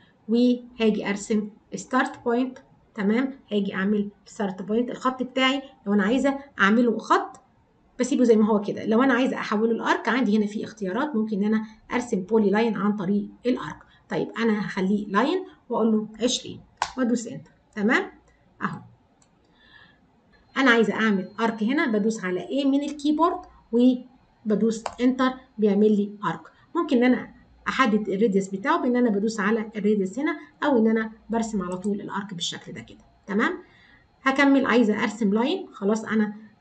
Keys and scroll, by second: 22.7 a.